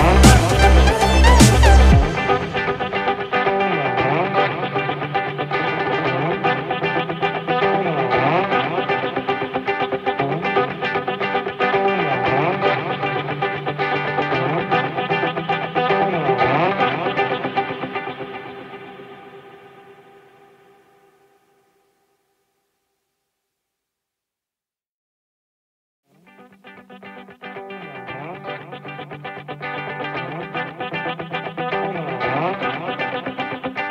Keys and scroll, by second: 0.2 ctrl+-, 0.4 ctrl+=, 2.3 ctrl+space, 16.7 ctrl+=, 30.0 Down, 31.4 Up, 33.5 Down.